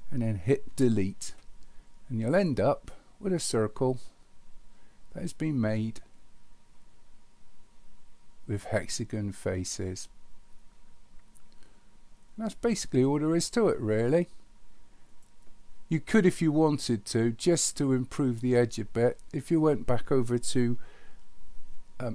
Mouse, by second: 2.4 click, 13.4 click, 15.1 click.